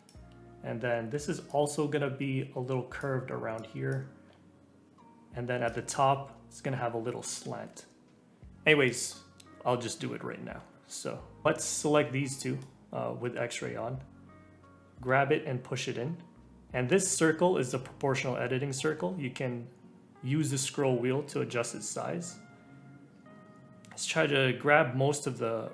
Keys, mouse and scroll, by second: 1.5-7.6 drag, 7.6 ctrl+z, 8.5-9.5 drag, 9.5 ctrl+z, 9.8 ctrl+z, 10.1 ctrl+z, 10.4 ctrl+z, 10.7 ctrl+z, 11.4 click, 14.9 g.